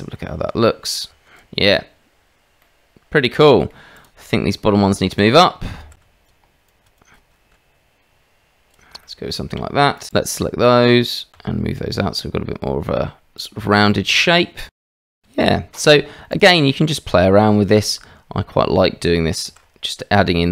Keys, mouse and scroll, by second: 1.1 Tab, 2.6-3.1 drag, 3.4 click, 3.9 click, 4.7 Tab, 5.8 shift+z, 6.3 click, 6.7 click, 7.5 g, 9.0 shift+middle click, 9.9 shift+middle click, 10.2-11.3 drag, 11.3 g, 14.9 shift+z, 15.2 Tab, 15.4 click, 16.6 Tab, 19.4 ctrl+r.